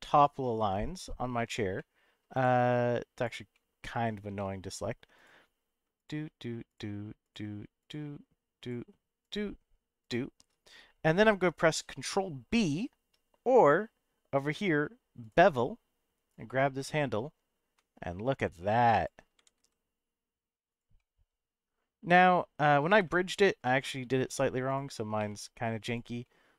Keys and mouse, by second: 1.7 middle click, 2.3 click, 3.2 click, 3.5 middle click, 4.4 middle click, 5.1 click, 5.9 shift+click, 7.2 shift+click, 8.6 shift+click, 10.0 shift+click, 15.3-19.0 drag, 19.4 g, 19.6 z, 20.7 click, 20.9-22.4 middle drag, 23.1 shift+middle click, 23.8 middle click, 24.7 click, 25.2 1, 25.8 click, 26.2 middle click.